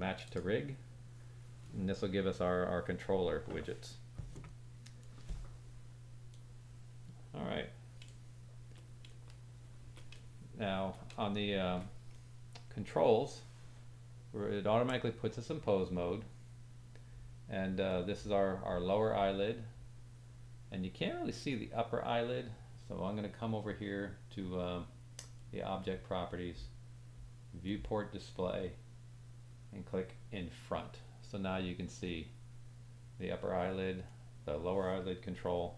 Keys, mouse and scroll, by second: 0.2 click, 6.4-8.0 middle drag, 9.0 middle click, 10.1 middle click, 11.2 shift+middle click, 12.2 middle click, 18.0-25.4 drag, 25.5-27.7 drag, 30.2-32.1 drag, 32.2-34.2 drag.